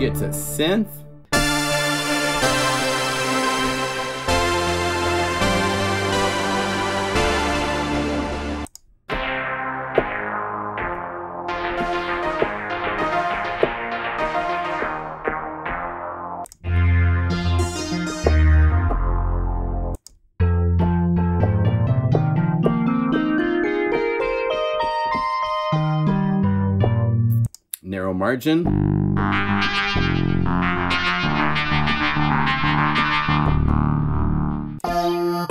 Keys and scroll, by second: 1.3 F4, 4.2 F1, 4.2 F2, 4.2 F3, 11.5 F3, 11.7 F4, 11.8 F3, 12.1 F2, 12.7 F3, 13.1 F4, 13.4 F3, 13.9 F3, 14.3 F4, 14.4 F3, 15.6 F2, 16.6 F2, 17.3 F3, 17.4 F2, 17.6 F4, 17.9 F3, 18.8 F1, 18.8 F2, 20.8 F2, 21.1 F1, 29.9 F1, 30.6 F3, 30.7 F2, 30.8 F4, 31.0 F3.